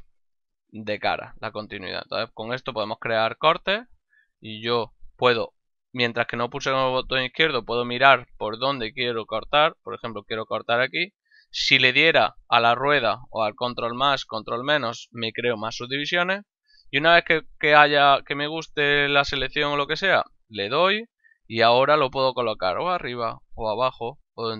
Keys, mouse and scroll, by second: 20.6 click.